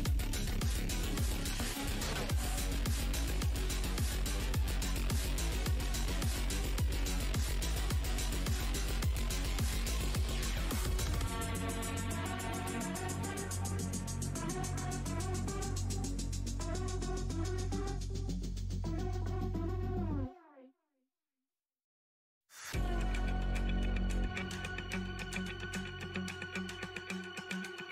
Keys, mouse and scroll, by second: 0.0 scroll down 2, 0.8 click, 1.0 w, 1.8 space, 2.4 click, 5.5 right click, 5.7 click, 6.4 shift+right click, 6.8 alt+click, 7.0 alt+scroll up 1, 9.6 w, 10.3 click, 11.2 scroll down 2, 11.3 scroll, 12.2 shift+d, 12.5 shift+v, 14.2 alt+scroll down 1, 14.5 w, 16.4 shift+click, 16.5 shift+h, 16.9 space, 18.3 space, 19.1 alt+click, 19.9 w, 19.9 space, 23.0 z, 23.8 alt+click, 25.6-26.2 scroll down 1, 25.6 w, 26.2 scroll down 1, 26.9 alt+scroll up 1, 27.1 shift+d, 27.4 shift+x.